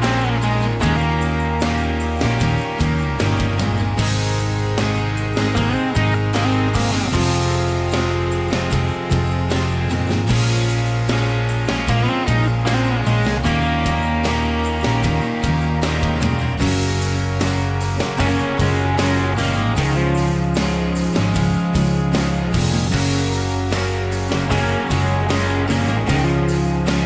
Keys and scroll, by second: 3.8 Escape.